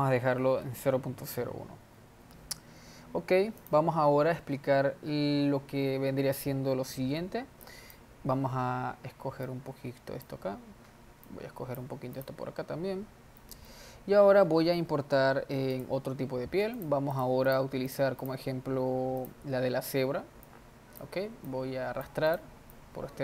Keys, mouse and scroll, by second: 2.1-3.6 scroll down 4, 3.6 click, 7.7 click, 9.5-13.4 drag, 13.4-14.9 middle drag, 22.8 click.